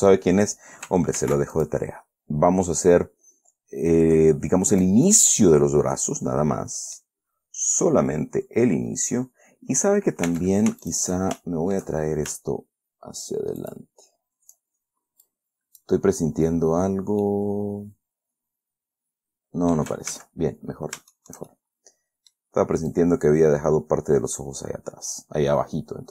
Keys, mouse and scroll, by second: 1.5 ctrl+r, 1.9 ctrl+click, 5.1 click, 5.4 middle click, 5.5 scroll down 2, 7.7 scroll down 2, 8.2 scroll up 2, 8.6 scroll down 2, 9.3-9.6 scroll up 2, 10.6 Tab, 11.2 shift+right click, 11.7 shift+click, 12.6-13.9 shift+scroll up 1, 13.9 shift+click, 15.6 click, 16.3-16.9 scroll down 2, 17.2 scroll down 2, 17.6-18.7 drag, 18.7-20.3 middle drag, 20.4 ctrl+z, 20.8-21.5 ctrl+scroll up 4, 21.5-22.9 shift+middle drag, 23.2-26.1 drag.